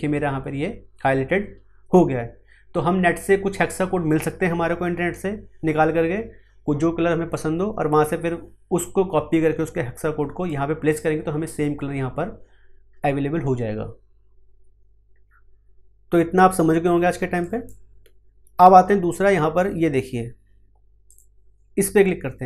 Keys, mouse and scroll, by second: 10.4-17.4 drag, 21.0 click.